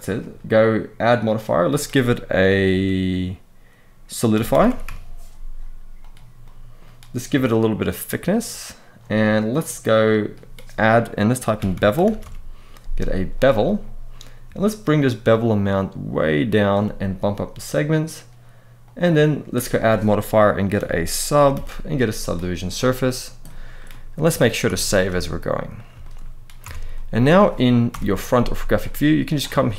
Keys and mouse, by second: 0.8 click, 6.2 middle click, 7.3-8.7 shift+drag, 9.3 click, 9.8-13.2 drag, 14.6-16.4 shift+drag, 17.5 click, 17.6 click, 18.6 click, 19.3-22.5 drag, 23.2-23.5 middle drag, 24.4 ctrl+s, 24.7 ctrl+s, 25.0-25.5 middle drag, 25.8 shift+middle drag, 26.4 Tab, 26.7 middle click, 27.6 KP_1, 28.3 z, 29.3 shift+middle click.